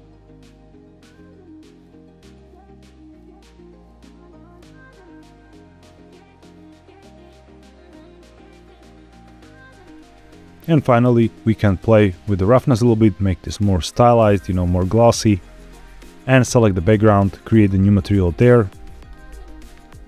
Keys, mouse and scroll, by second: 0.0 click, 0.9 click, 2.2 click, 2.5-3.5 drag, 8.5 click, 9.7 click, 11.1-15.3 drag, 15.9 click, 17.0 click, 17.7-18.7 drag.